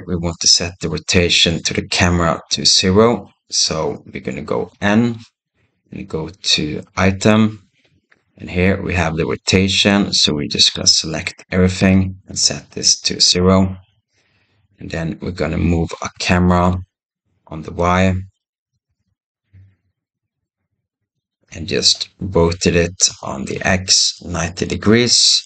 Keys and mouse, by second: 4.5 n, 9.6-13.2 drag, 16.4 g, 18.5 g, 23.0 r.